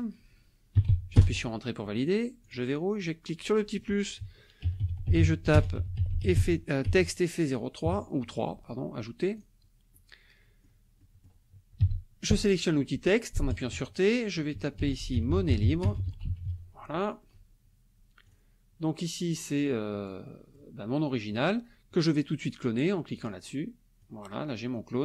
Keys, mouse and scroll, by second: 0.0-1.4 typing, 2.4 click, 3.0 click, 4.4-7.8 typing, 9.4 click, 9.9 click, 11.0 click, 11.8 t, 13.5 click, 14.5-17.0 typing, 18.3 click, 19.3-20.7 drag, 23.2 click, 24.0-25.0 drag.